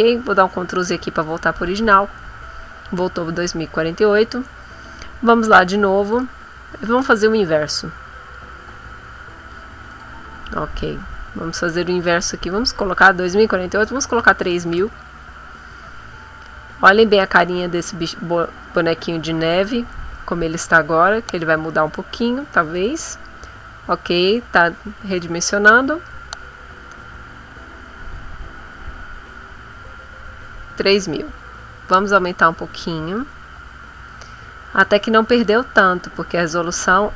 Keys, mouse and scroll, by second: 0.8 ctrl+z, 6.0 click, 9.9 click, 12.0 click, 12.5 click, 14.2 3, 14.4 0, 16.4-22.2 drag, 22.8 click, 31.6 scroll up 1, 32.1 scroll up 1, 32.8-33.2 scroll up 2, 33.6-34.1 scroll up 4, 34.4 scroll up 2, 35.2 scroll up 2, 36.1-37.0 scroll down 4.